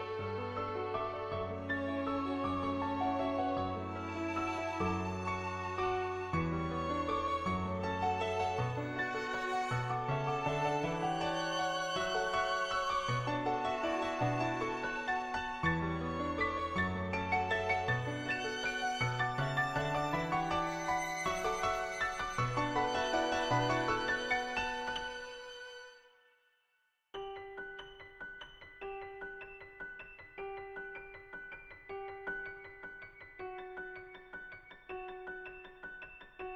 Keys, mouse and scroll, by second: 0.5 click, 3.3 click, 4.5 ctrl+z, 4.6-8.7 typing, 6.1 click, 6.7 click, 7.2 click, 7.9 ctrl+z, 8.2 click, 11.6 ], 11.7 ], 11.8 click, 14.9 click, 15.7-17.3 drag, 17.3 ], 17.4 ], 17.5-18.9 drag, 17.5 ], 19.2 click, 19.6 [, 19.9 click, 20.3 [, 20.5 click, 20.8 [, 21.2 click, 22.4 [, 22.6 click, 23.0 ctrl+z, 24.5 [, 24.6 [, 26.0 click, 26.5 shift+click, 27.6 click, 28.5 shift+click, 29.1 click, 29.8 shift+click, 30.3-31.9 middle drag, 32.3 middle click, 34.7-35.7 typing, 34.9 click, 35.5 ctrl+z, 36.0 click.